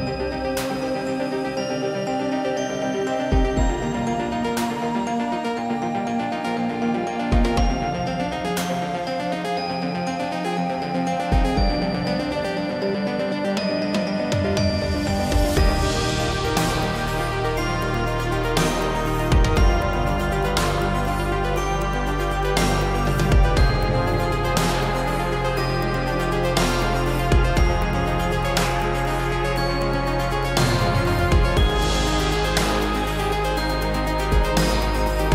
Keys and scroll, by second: 16.0 ctrl+l, 34.0 ctrl+j.